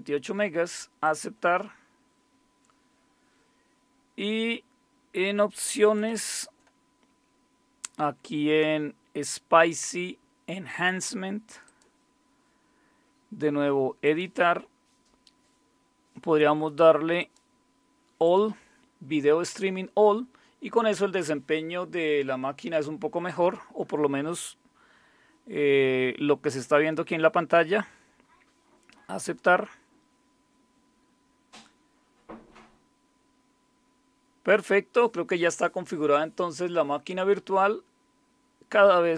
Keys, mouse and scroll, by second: 0.0-0.2 typing, 1.0 click, 5.9 click, 6.9-7.9 scroll down 1, 11.6 click, 14.0 click, 17.2 click, 18.2 click, 29.2 click.